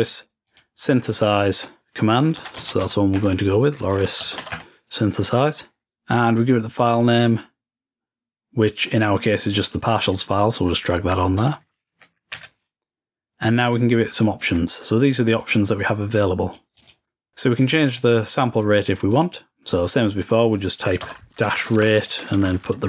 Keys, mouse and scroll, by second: 6.3-7.8 drag, 10.2-12.4 drag, 13.7 click, 14.5-15.4 scroll down 1, 15.5-17.3 drag, 18.1-20.2 drag, 20.3 click.